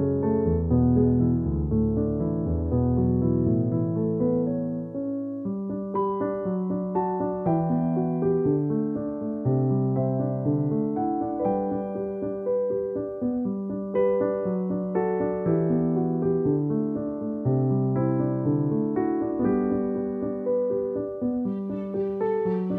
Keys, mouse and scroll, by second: 1.3 right click, 1.7 click, 2.4 alt+click, 3.5-4.5 typing, 5.3 click, 15.4 ctrl+-, 16.6 ctrl+shift+f, 17.5 click, 18.6 space, 18.9 click, 18.9 space, 19.8 ctrl+=, 21.7 click.